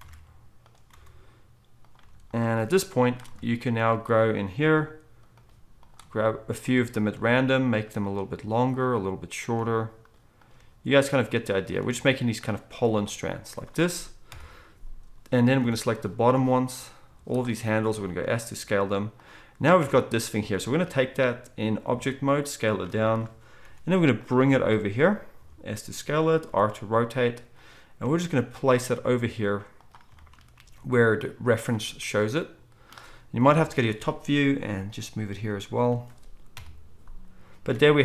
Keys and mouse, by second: 0.0 shift+d, 0.9 r, 2.0 g, 4.7 g, 7.1 g, 8.1 g, 10.5 g, 11.7 g, 12.8 r, 14.2 KP_1, 15.5 z, 17.0-19.8 drag, 17.0 z, 17.9 s, 19.8 Tab, 21.9 s, 23.6 g, 25.4 s, 26.4 r, 28.0 g, 28.9 s, 30.6 g, 33.4 KP_7, 34.6 g, 36.5 KP_1, 37.7 alt+a.